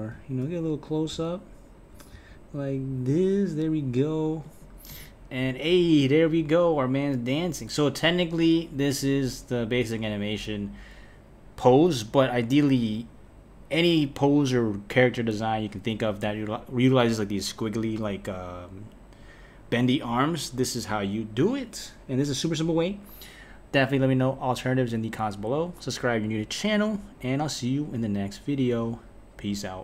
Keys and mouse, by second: 4.9 space.